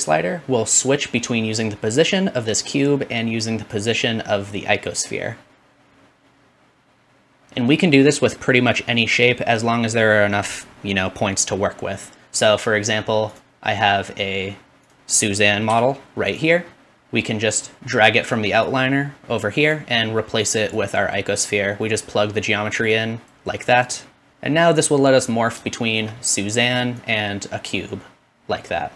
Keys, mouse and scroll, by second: 13.4-18.7 middle drag, 15.7 g, 16.9 click, 18.7-19.7 drag, 20.6-21.3 typing, 20.6-23.9 drag, 23.9 middle click, 24.3-28.9 drag.